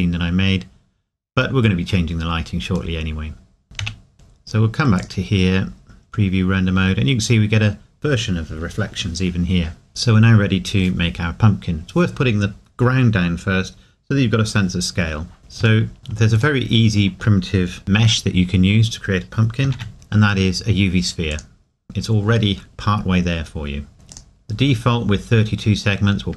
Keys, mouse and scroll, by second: 1.5 scroll down 1, 3.0 middle click, 3.8 KP_1, 5.0 click, 6.6 scroll up 1, 9.9 ctrl+s, 15.6 click, 15.8 shift+middle click, 16.6 shift+middle click, 19.6 shift+middle click, 21.3 click, 24.1 click.